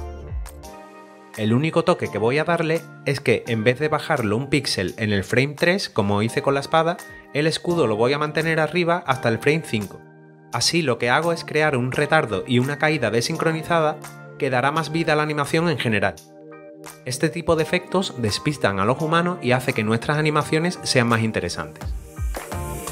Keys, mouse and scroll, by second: 22.8 click.